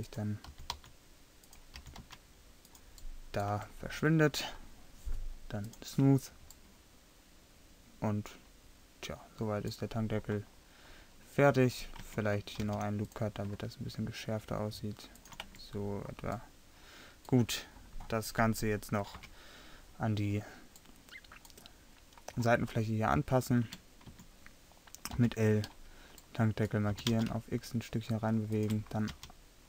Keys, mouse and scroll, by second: 0.5 g, 1.8 g, 3.6 Tab, 6.3-6.8 drag, 7.6-8.2 middle drag, 8.8-10.8 middle drag, 12.1 Tab, 12.7 ctrl+r, 15.5 Tab, 19.2 KP_7, 23.7 Tab, 24.1 a, 25.2 l, 27.0 g, 29.1 r.